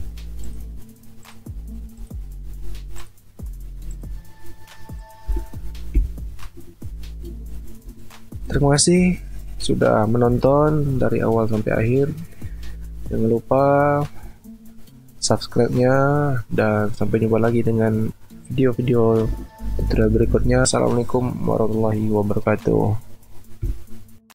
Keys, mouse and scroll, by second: 5.3 f, 6.7 alt+scroll up 1, 7.5 alt+click, 7.8 space, 23.6 f.